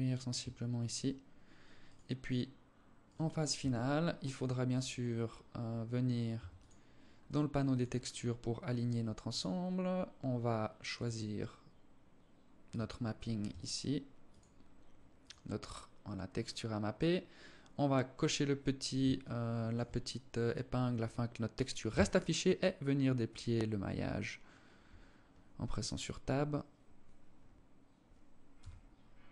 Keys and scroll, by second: 2.8 Tab, 5.6 Tab.